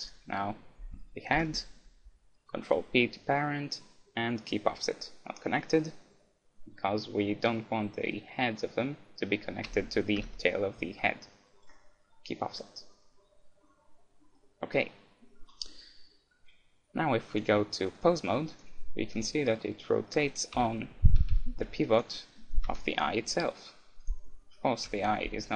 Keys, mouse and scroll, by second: 1.3 ctrl+p, 10.2 ctrl+p, 14.4-16.1 middle drag, 17.3-18.6 drag, 18.6 middle click, 19.1 r, 19.1-21.8 right drag, 20.6 KP_1, 21.2 r, 22.1-23.8 middle drag, 22.1-23.7 right drag, 22.8 KP_3, 23.1 r, 24.1 right click, 24.9 KP_1.